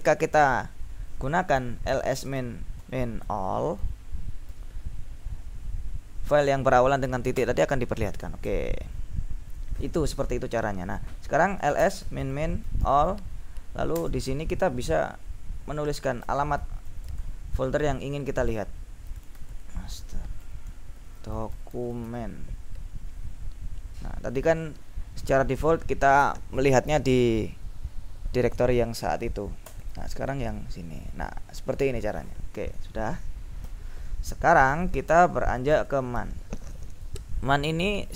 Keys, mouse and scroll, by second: 1.7 ctrl+l, 2.1 ctrl+s, 2.3 ctrl+space, 2.5 ctrl+-, 3.3 ctrl+a, 3.9 ctrl+l, 4.5 l, 7.5 Return, 8.5 ctrl+l, 11.5-14.1 typing, 16.1-22.6 typing, 29.8 Return, 33.7 ctrl+l, 35.4-36.4 typing.